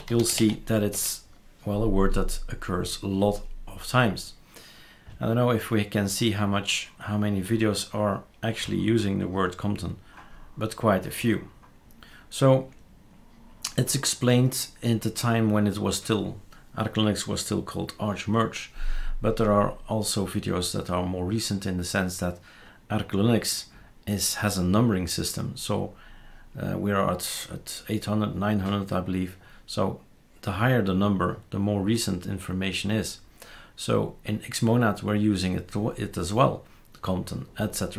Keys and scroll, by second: 0.0-0.9 typing.